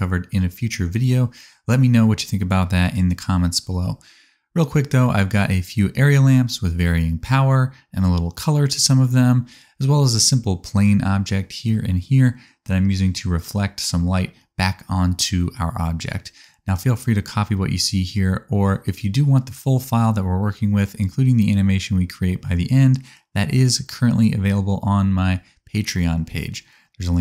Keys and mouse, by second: 4.4-7.0 middle drag, 4.4-7.0 right drag, 8.1 middle click, 8.1 right click, 12.0 middle click, 12.0 right click, 12.8 middle click, 12.8 right click, 24.5 middle click, 24.5 right click, 25.4 g, 26.5-27.2 middle drag.